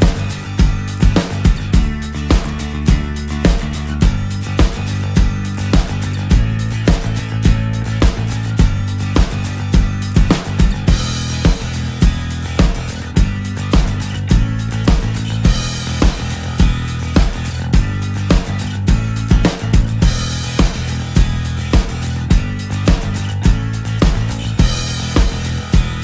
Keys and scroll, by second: 25.4 ctrl+z.